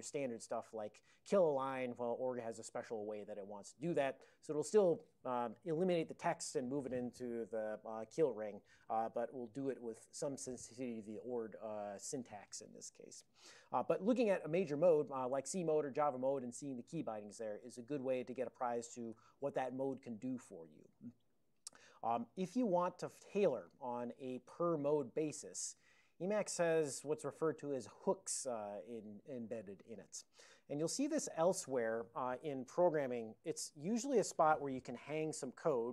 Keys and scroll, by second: 0.4 ctrl+p, 18.8 ctrl+x, 19.2 o, 19.7 ctrl+x, 20.1 1, 20.8 ctrl+a, 22.4 ctrl+n, 22.9 ctrl+n, 23.2 ctrl+n, 30.5 ctrl+l, 31.1 ctrl+l.